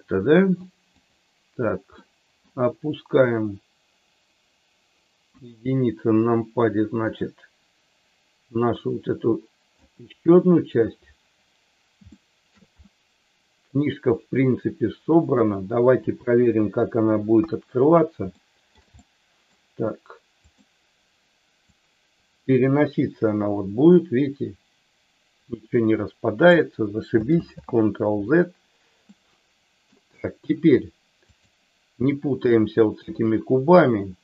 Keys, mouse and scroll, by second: 0.8 click, 1.9 middle click, 5.2 KP_1, 7.0-9.8 drag, 12.2 shift+middle click, 12.8-15.3 middle drag, 16.2 KP_3, 17.3 KP_1, 18.3 shift+middle click, 19.0 middle click, 21.7-26.4 drag, 27.3 ctrl+z, 29.1 middle click.